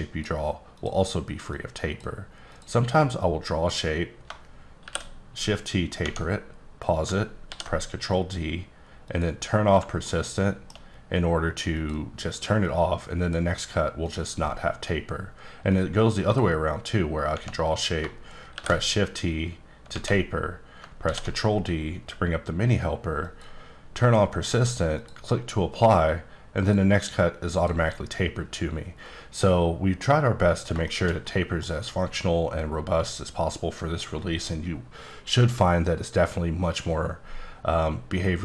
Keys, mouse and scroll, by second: 0.7 click, 1.5 click, 2.4 click, 3.2 click, 4.8 shift+t, 6.0 Tab, 7.4 ctrl+d, 9.0 click, 10.0 shift+middle click, 11.7 click, 12.6 click, 14.0 click, 15.7 click, 17.2 Tab, 18.5 shift+t, 19.9 Tab, 20.9 ctrl+d, 23.1 click, 24.9 click, 26.1 click, 27.6 click, 30.8 shift+middle click.